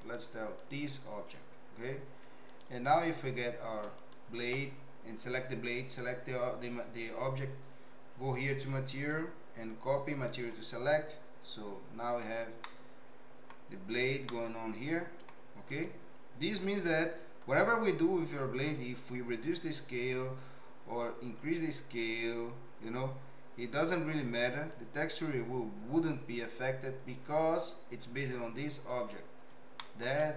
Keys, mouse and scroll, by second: 0.1 click, 2.4 click, 8.9-10.3 drag, 12.6 middle click, 14.3 middle click, 15.7 click, 18.6 s, 30.0 shift+middle click.